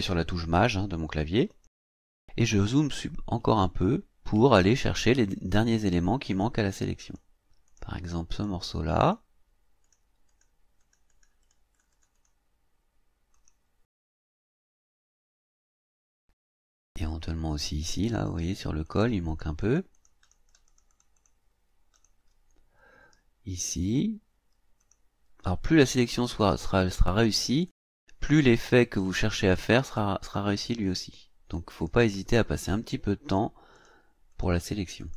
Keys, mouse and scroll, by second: 1.5 click, 2.5-2.9 ctrl+scroll up 2, 3.6-4.0 ctrl+scroll up 1, 4.5 ctrl+scroll up 2, 6.2 click, 7.0 click, 7.7 click, 8.3 click, 9.0 click, 9.8 click, 10.3 click, 10.8 click, 13.3 click, 14.2 scroll down 1, 15.0 scroll up 1, 15.5 scroll down 1, 16.1 scroll up 1, 18.1 click, 18.8 click, 19.3 click, 20.5 click, 21.9 click, 24.8 click, 25.8 click, 26.4 click, 27.7 click, 28.8 click, 29.9 click, 31.7 click, 33.3 click, 33.7 click, 34.3 click, 35.0 click.